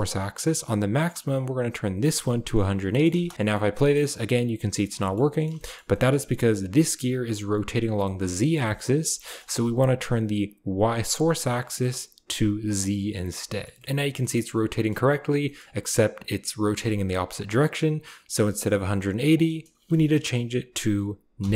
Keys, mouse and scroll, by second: 1.0-2.6 drag, 3.3 space, 3.6 click, 4.8 click, 5.0 shift+click, 5.3 click, 5.5 shift+middle drag, 5.9 shift+middle click, 8.0 shift+middle click, 8.6 shift+middle click, 9.0 shift+middle click, 9.2 shift+middle click, 11.6-12.9 drag, 13.5 shift+middle click, 13.7 middle click, 14.2-14.6 middle drag, 14.6 drag, 15.4 click, 18.7-21.5 drag.